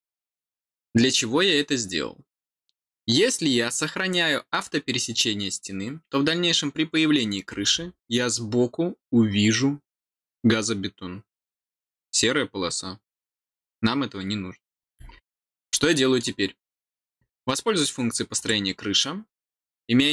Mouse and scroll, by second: 0.3-1.0 scroll down 2, 7.7 scroll up 2, 14.6-15.3 scroll down 6, 15.6 middle click, 18.3 click.